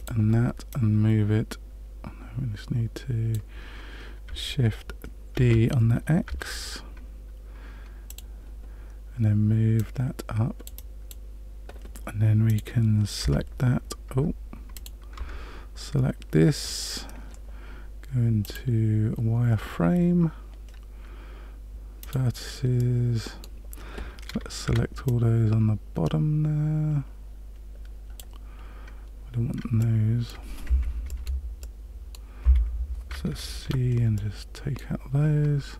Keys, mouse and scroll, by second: 0.7 click, 5.3 shift+d, 9.7 click, 10.7 click, 12.4 click, 13.2 Tab, 14.2 Tab, 14.7 click, 15.3 Tab, 18.4 click, 22.0 click, 22.7 middle click, 24.6 c, 31.6 middle click, 32.4 Escape, 33.6 c.